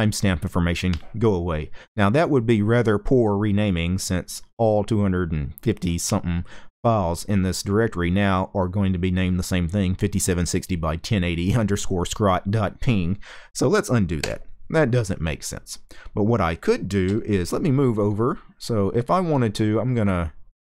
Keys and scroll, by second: 13.9 u, 17.3 k, 19.2-20.7 typing.